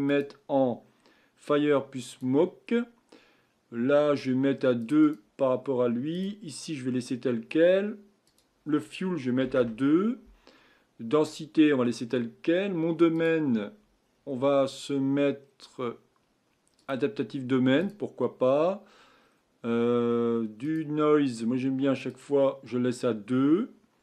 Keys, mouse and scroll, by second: 0.1-3.1 drag, 4.8-6.2 drag, 8.2-11.4 drag, 13.1 click, 14.1-14.4 scroll down 4, 15.4-15.8 scroll down 2, 16.8-19.2 drag, 19.2-21.2 scroll down 4, 22.1-24.0 drag.